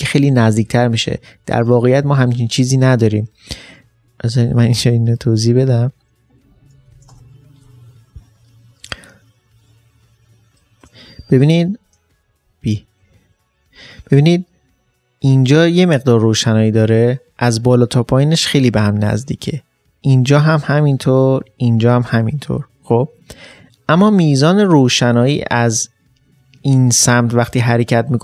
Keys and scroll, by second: 6.9 ctrl+shift+n, 7.1 Return, 12.3 alt+b, 25.5 alt+b.